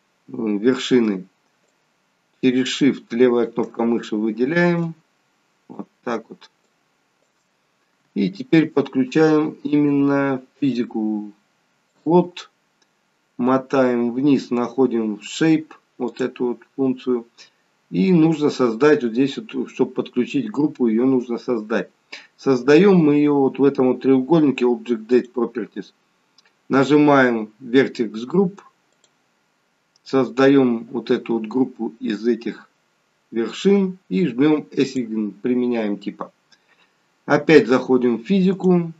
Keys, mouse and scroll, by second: 1.7 shift+click, 10.6 click, 11.9 click, 12.8-13.2 scroll down 3, 14.8 scroll down 12, 16.1 click, 25.1 click, 28.9 click, 35.3 click, 38.5 click.